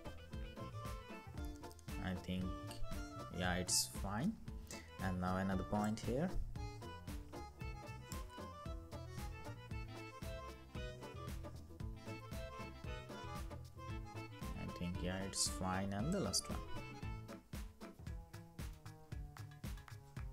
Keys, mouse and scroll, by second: 0.0 Down, 0.7 Down, 1.3 Right, 2.4 Right, 8.0 Right, 9.2 Right, 9.5 Right, 10.0 Right, 10.7 Right, 10.9 Right, 11.8 Right, 12.7 Down.